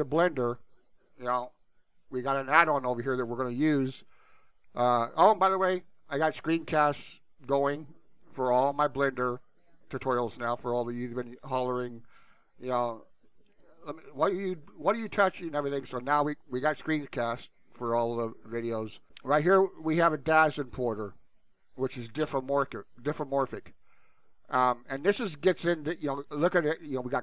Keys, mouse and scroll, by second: 2.7 alt+/.